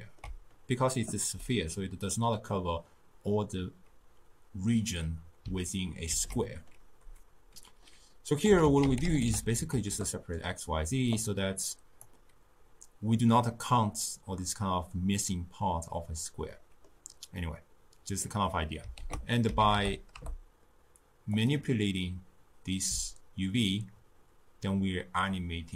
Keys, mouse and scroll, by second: 6.1 ctrl+a, 11.7-13.2 drag, 13.2-16.3 middle drag, 16.6-19.1 middle drag, 19.1 ctrl+a, 23.1-25.7 shift+drag.